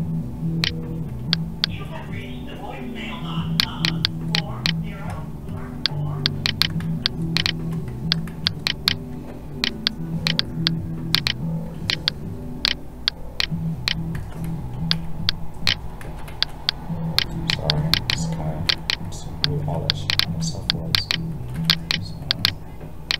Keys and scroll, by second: 6.8 ctrl+z, 8.3 ctrl+z, 14.1 ctrl+z, 16.0 ctrl+z.